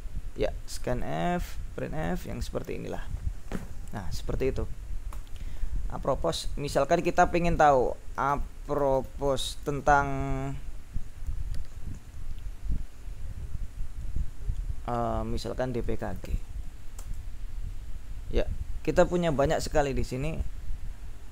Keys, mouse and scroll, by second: 0.7 click, 1.5 click, 1.9 click, 2.9 click, 3.0-3.6 scroll up 4, 5.1 q, 6.5 ctrl+l, 8.0-9.9 typing, 15.7-17.0 typing, 17.1 Return, 18.9-20.2 scroll up 3.